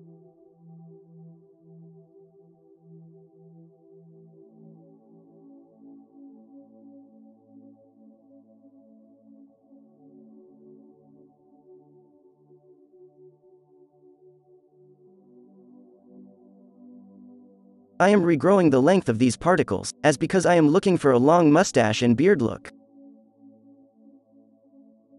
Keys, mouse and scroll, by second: 4.5 drag, 5.0-5.4 scroll, 6.2-6.5 scroll, 7.5-9.8 f, 10.0 click, 11.8 drag, 13.4 f, 16.2-17.8 drag, 18.1 n, 19.0 n, 19.9 f, 22.5 f.